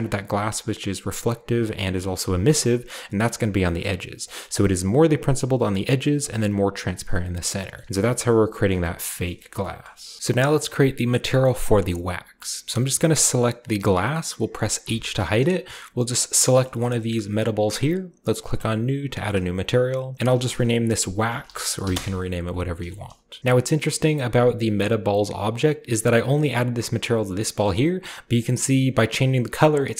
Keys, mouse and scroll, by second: 2.9 ctrl+shift+click, 3.6 middle click, 4.2 click, 6.2 click, 6.9-8.1 scroll down 1, 7.1-8.7 middle drag, 7.8-8.3 typing, 8.1-9.2 scroll up 1, 9.2 shift+middle click, 9.2-9.9 scroll up 1, 9.5 shift+middle click, 9.8 shift+middle click, 9.9 shift+scroll down 1, 10.1-11.3 shift+middle drag, 10.2 ctrl+alt+Left, 11.5-13.6 shift+middle drag, 11.6-13.6 shift+scroll up 1, 13.6 click, 14.8 h, 15.2-18.3 shift+middle drag, 15.4-16.1 shift+scroll up 1, 16.1-18.3 shift+scroll up 1, 18.4-20.1 drag, 19.3 shift+middle click, 21.3-21.8 typing, 21.9 Return, 22.9 shift+middle drag, 23.2 shift+scroll up 1, 23.3 typing, 25.6-27.4 drag, 25.6-27.4 right drag, 26.4-27.3 shift+scroll up 1, 27.3 shift+scroll up 1, 27.4-29.9 shift+middle drag, 27.4 scroll down 1, 28.4-29.9 shift+drag.